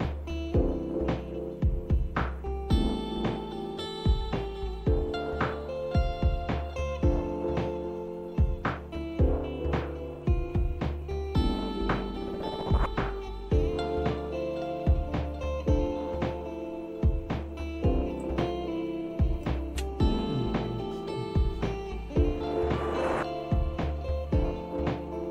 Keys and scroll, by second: 1.2-1.9 scroll up 1, 1.9-2.6 scroll up 1, 2.6-4.6 scroll up 1, 4.6-5.3 scroll up 1, 5.3-6.0 scroll up 1, 6.0-6.9 scroll up 1, 6.9-7.7 scroll up 1, 7.7-8.4 scroll up 1, 8.4-10.8 scroll up 1, 10.8-11.6 scroll up 1, 11.6-12.6 scroll down 1, 12.6-14.2 scroll down 1, 14.2-16.1 scroll down 1, 16.1-18.0 scroll down 1, 18.0-19.4 scroll down 1, 19.4-21.2 scroll down 1, 21.2-23.0 scroll down 1, 23.0-25.3 scroll down 1.